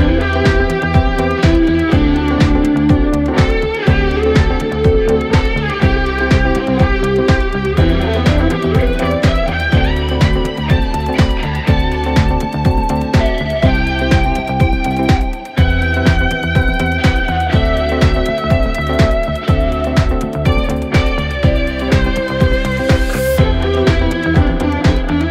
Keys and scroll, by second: 0.0 4, 11.0 3, 11.2 ], 12.0 9, 12.1 Return, 16.9 ].